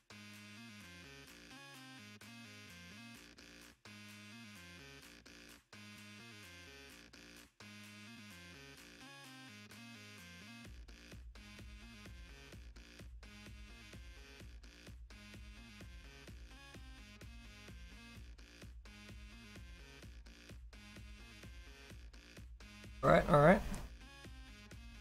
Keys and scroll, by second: 9.0 ctrl+z, 9.2 ctrl+z.